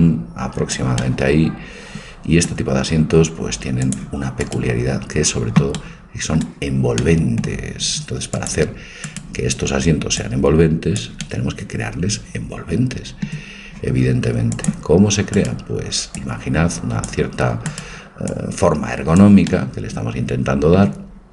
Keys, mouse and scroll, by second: 1.0-3.0 middle drag, 3.8-5.6 drag, 4.4-6.3 right drag, 5.8 middle click, 8.4-10.2 drag, 9.0-10.2 right drag, 11.0 click, 12.1 middle click, 14.5-17.0 drag, 15.3-17.0 right drag, 17.3 right click, 18.0 click, 19.5 middle click, 19.7 click.